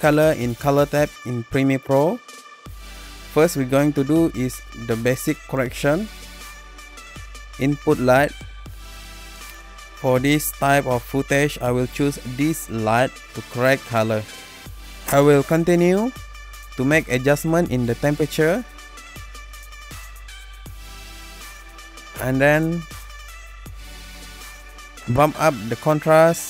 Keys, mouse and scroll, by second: 8.7 click, 11.2 click, 13.3 click, 21.2 click, 24.8 click.